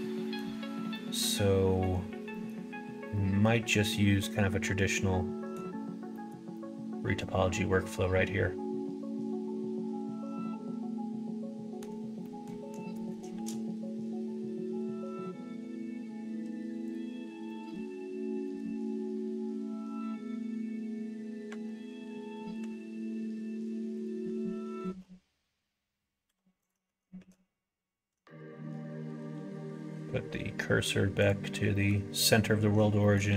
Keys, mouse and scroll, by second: 0.9 middle click, 2.2 middle click, 3.1 middle click, 3.6-5.5 middle drag, 6.0 middle click, 6.5-11.7 middle drag, 12.2 middle click, 12.9 middle click, 13.2 shift+a, 17.5 middle click, 18.4 middle click, 21.4 Tab, 22.5 s, 24.2 ctrl+z, 24.8 ctrl+z, 26.2 x, 27.1 shift+a, 28.3 shift+s, 31.7 middle click, 33.0 middle click, 33.2 shift+a.